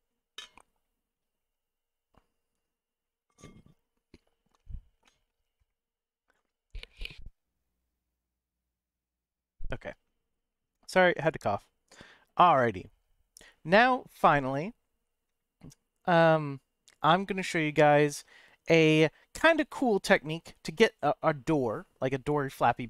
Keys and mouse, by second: 10.9-12.1 middle drag, 12.7-15.2 middle drag, 17.6-19.3 middle drag.